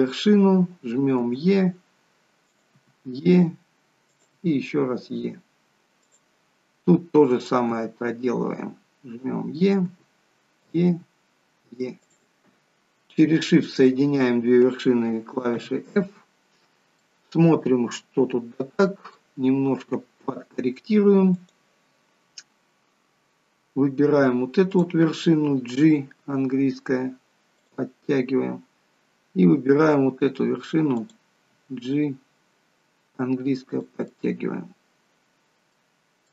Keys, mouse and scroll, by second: 1.1 e, 2.7 e, 7.3 click, 7.6 e, 9.8 e, 13.7 shift+click, 15.4 f, 17.0 middle click, 19.4-20.1 scroll up 3, 21.3 click, 21.3-22.0 scroll down 1, 24.7 click, 25.7 g, 30.9 click, 31.4 g, 34.1 middle click.